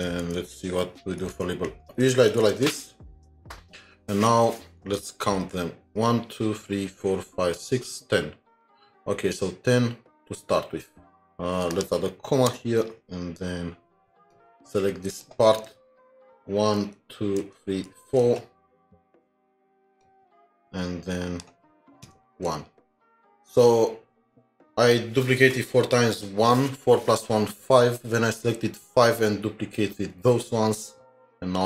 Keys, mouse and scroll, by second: 0.3 typing, 0.4 alt+Tab, 1.3 alt+Tab, 2.1 typing, 3.7 typing, 4.8 alt+Tab, 10.1 alt+Tab, 11.1 scroll down 1, 16.3 alt+shift+Down, 16.8 alt+shift+Down, 17.9 alt+shift+Down, 22.1 alt+shift+Down, 23.0-25.2 scroll up 2, 30.7-31.3 scroll down 2, 31.4-31.6 scroll down 2.